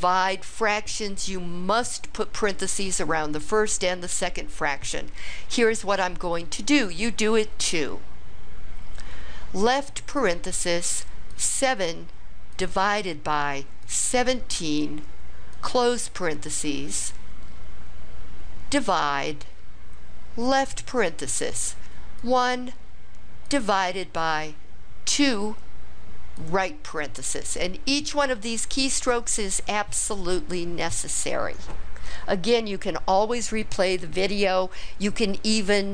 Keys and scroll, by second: 9.6 (, 11.4 7, 12.6 /, 13.9 1, 14.7 7, 15.6 ), 18.8 /, 20.6 (, 22.2 1, 23.5 /, 25.2 2, 26.4 ).